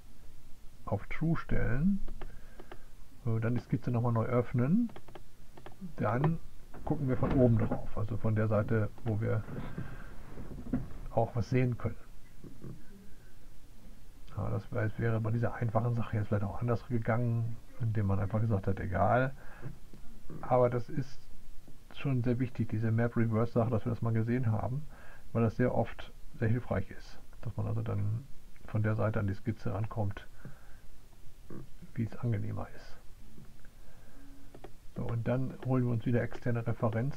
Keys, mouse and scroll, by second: 0.0 click, 1.1 click, 1.9 click, 4.2 click, 7.1 click, 36.1 click.